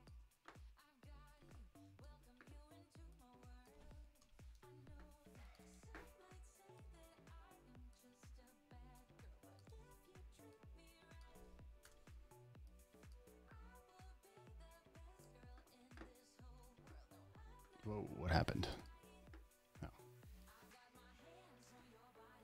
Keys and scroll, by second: 4.8 super+a, 4.9 super+v, 6.0 super+d, 6.1 v, 10.1 super+t, 12.1 Return, 12.3 v, 16.0 super+s, 16.9 super+w, 22.2 super+a.